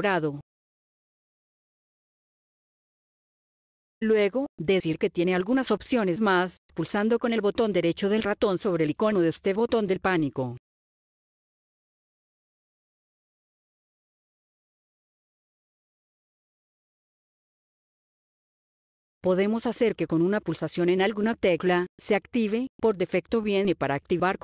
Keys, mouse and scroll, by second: 3.9 click, 6.8 right click, 11.3 click, 12.9-14.5 scroll down 8, 14.9 scroll down 1, 19.1 click, 20.5-20.9 scroll up 4, 21.7 scroll down 1.